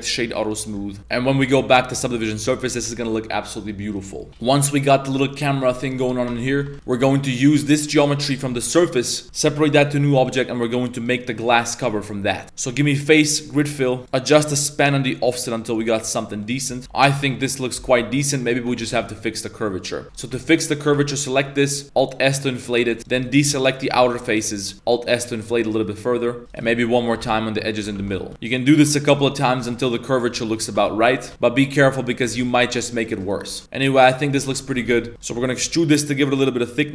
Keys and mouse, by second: 0.4 middle drag, 1.0 ctrl+s, 1.5 click, 2.1 middle click, 2.7 a, 2.8 a, 2.9 middle click, 4.0 right click, 4.2 middle click, 4.3 Tab, 4.4 shift+middle drag, 5.8 middle drag, 6.3 Tab, 6.6 1, 6.8 alt+right click, 7.1 middle click, 7.7 middle click, 8.3 middle drag, 8.5 z, 9.1 middle click, 9.2 z, 9.6 p, 10.1 Tab, 10.3 right click, 10.6 right click, 11.0 right click, 12.4 ctrl+s, 12.4 1, 12.4 z, 12.4 a, 12.7 click, 14.0 click, 14.4 click, 14.7 click, 16.1-16.4 middle drag, 16.7 z, 16.8 Tab, 16.8-17.1 middle drag, 17.2 Tab, 17.3-17.8 middle drag, 17.8 2, 18.0-18.4 middle drag, 18.7 middle click, 18.8 a, 19.0-19.8 middle drag, 19.9 middle click, 20.0 3, 20.1 right click, 20.7 ctrl+shift+right click, 21.0-21.8 middle drag, 21.8 alt+s, 23.0 alt+shift+right click, 23.2 middle click, 23.9 alt+shift+right click, 24.1 middle click, 24.7 alt+shift+s, 26.0 middle click, 26.5 right click, 26.7 middle click, 27.8 alt+s, 28.0 Tab, 28.1 middle click, 28.3 3, 29.2 middle click, 29.7 middle click, 30.1 right click, 30.6 ctrl+shift+right click, 30.8 middle click, 31.3 Tab, 31.3-31.8 middle drag, 31.8 Tab, 31.9 middle drag, 32.3 z, 32.3 middle click, 32.7 middle click, 32.7 z, 33.1 right click, 33.3 shift+right click, 33.6-34.3 middle drag, 34.4 Tab, 34.7 1, 34.9 a, 35.0 middle click, 35.1 z, 35.2 shift+middle click.